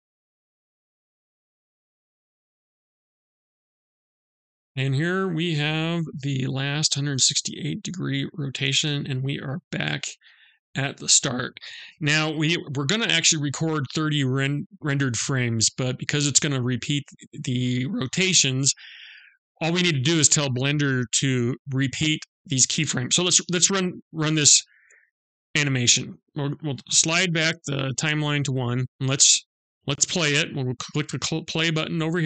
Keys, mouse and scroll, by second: 0.8-3.8 typing, 0.9 Right, 2.0 Right, 3.1 Right, 4.4 Right, 4.8 r, 10.4 i, 25.2 click.